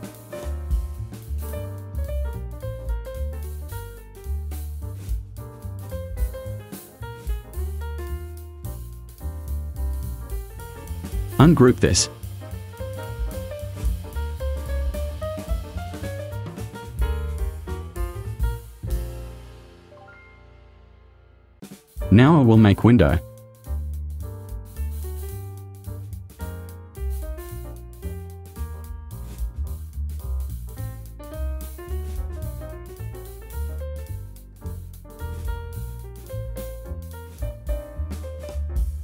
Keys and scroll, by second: 1.7 Right, 5.0 Right, 9.2 space, 15.4 Delete, 20.4 Delete, 36.5 0, 37.3 4.